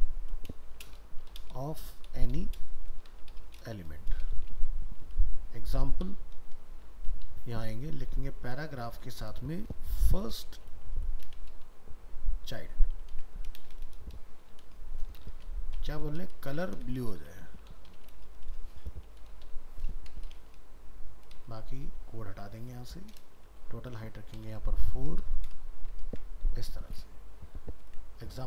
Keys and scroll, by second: 26.1 ctrl+s.